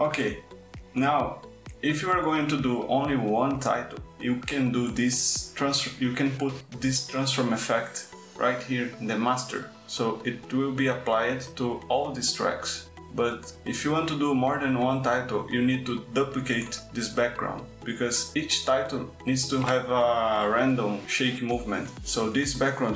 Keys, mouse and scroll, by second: 1.0 click, 2.1 click, 7.8 click, 11.5 click.